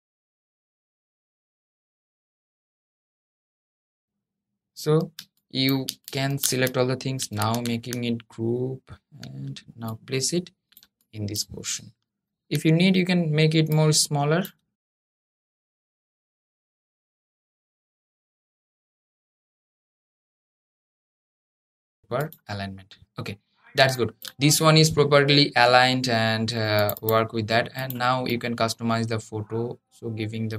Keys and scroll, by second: 3.3 Escape, 7.0 super+g, 16.9 super+g, 18.3 super+g, 19.2 super+z, 20.4 super+g, 20.8 super+g, 21.8 super+g.